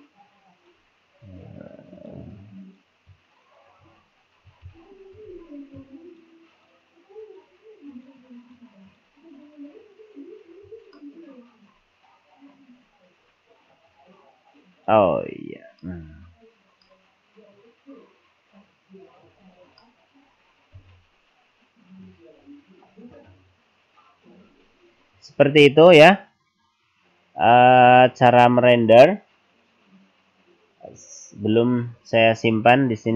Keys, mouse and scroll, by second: 0.9 right click, 2.1 click, 2.7 right click, 3.5 shift+right click, 4.7 ctrl+l, 6.1 shift+right click, 7.2 shift+right click, 11.0 middle click, 12.1 scroll up 1, 12.8 scroll up 1, 14.0 click, 15.2-15.8 scroll down 5, 15.9 middle click, 16.4 scroll down 3, 16.9 middle click, 19.5 scroll down 2, 19.8 middle click, 33.0-33.1 scroll down 2.